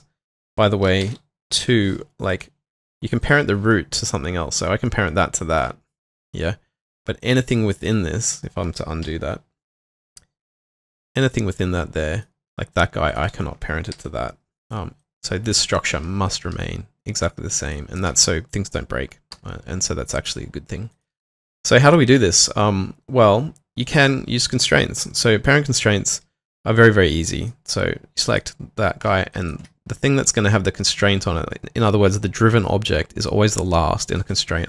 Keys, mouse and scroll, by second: 0.8 double click, 1.0 ctrl+shift+p, 2.8 double click, 3.7 middle click, 7.8 double click, 9.0 p, 13.1 ctrl+click, 13.9 p, 19.3 Delete, 21.2 typing, 29.3 shift+click.